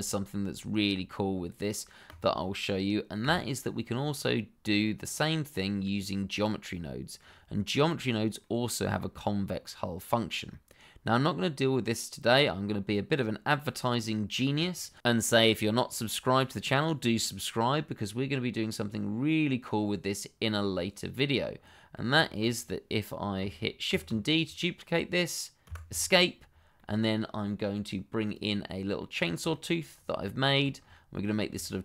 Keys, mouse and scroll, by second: 2.0 click, 3.2 Delete, 4.1 click, 4.6-4.9 scroll down 1, 4.9 middle click, 8.4 middle click, 9.7-10.5 scroll up 1, 10.5 middle click, 18.7 middle click, 22.3 shift+middle click, 22.5-23.4 scroll up 1, 23.8 shift+d, 25.6 Escape, 26.3-26.7 scroll down 1, 26.7 middle click, 28.3 click, 28.9 middle click, 29.7 shift+middle click, 29.9 scroll up 1, 30.2 shift+middle click, 30.7-31.1 scroll up 1, 31.6 shift+middle click.